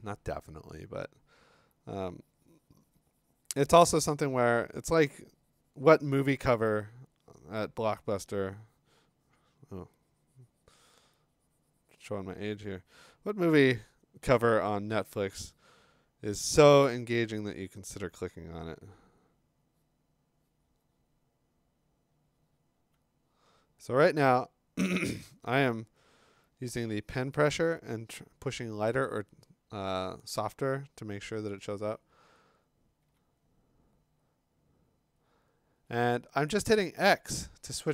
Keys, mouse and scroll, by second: 14.2 x, 22.8 x, 31.9 x, 33.0 x, 35.8 x.